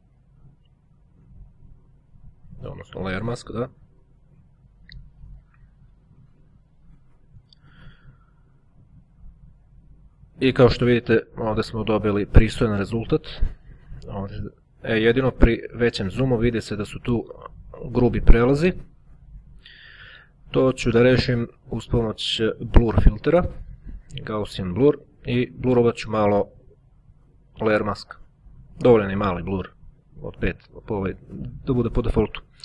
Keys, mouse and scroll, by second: 2.5 click, 4.2 right click, 7.3-8.9 drag, 10.8-11.2 ctrl+scroll up 1, 13.0-14.2 drag, 18.8 click, 19.8 click, 20.6-21.9 drag, 22.9 click, 24.6 click, 26.3-28.4 drag, 31.8 click.